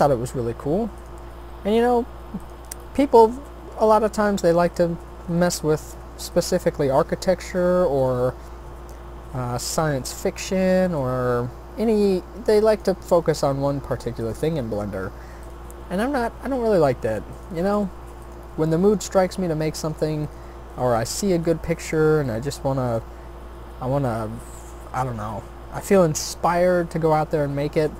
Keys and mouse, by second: 0.0 s, 1.4 e, 3.2 e, 5.1 s, 6.8 e, 8.4 s, 10.8 e, 13.1 s, 14.5 e, 15.8 s, 17.7 g, 21.0 shift+d, 22.2 r, 23.5 e, 24.9 s, 26.8 e.